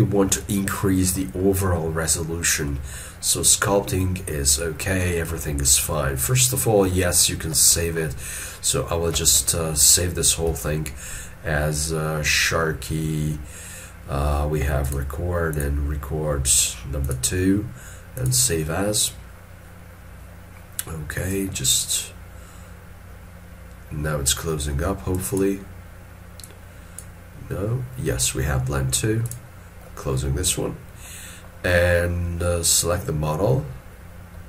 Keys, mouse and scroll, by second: 1.2 middle click, 6.9 scroll, 7.0 ctrl+middle click, 7.8 shift+middle click, 10.5 ctrl+shift+s, 30.2 middle click.